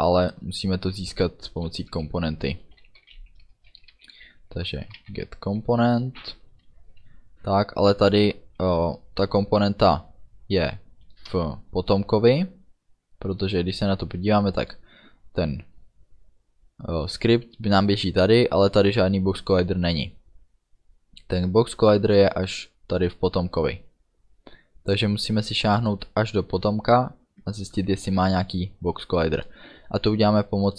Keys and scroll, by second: 1.2 Return, 2.7-5.2 typing, 6.6 Down, 8.5 Down, 11.2 Return.